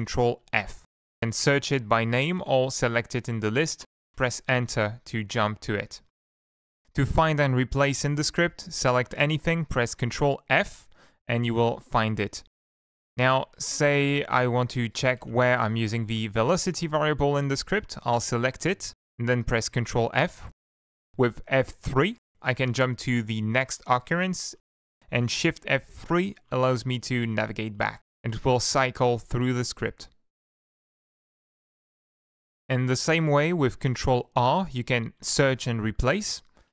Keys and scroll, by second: 0.5 ctrl+shift+f, 1.4 Down, 3.4 Down, 4.5 Return, 6.7 ctrl+End, 9.0 ctrl+shift+Left, 9.8 ctrl+f, 12.5 Escape, 13.3 Up, 13.8 ctrl+Up, 14.6 Up, 15.6 Up, 15.6 ctrl+Left, 15.8 ctrl+Left, 15.9 ctrl+Left, 16.5 ctrl+Right, 16.8 ctrl+Right, 17.1 ctrl+shift+Left, 19.2 ctrl+f, 21.5 F3, 23.2 F3, 23.8 F3, 24.2 F3, 24.5 F3, 26.0 shift+F3, 26.4 shift+F3, 26.7 shift+F3, 27.3 shift+F3, 27.8 shift+F3, 28.1 shift+F3, 28.6 shift+F3, 28.8 shift+F3, 29.1 shift+F3, 31.8 Down, 32.4 Down, 32.6 Down, 32.8 Down, 32.9 Down, 33.1 Down, 33.3 Down, 33.6 ctrl+Right, 34.0 ctrl+Right, 34.5 ctrl+shift+Left, 35.3 ctrl+r.